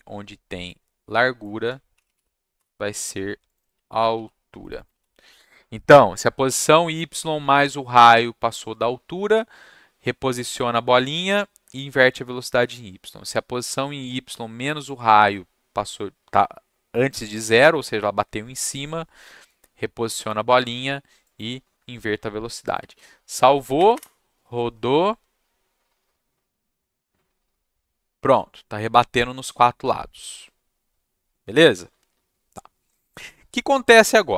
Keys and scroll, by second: 1.7-2.6 typing, 4.1 ctrl+c, 4.3 =, 4.9 ctrl+v, 22.8 ctrl+s, 23.7 Up, 23.9 Return.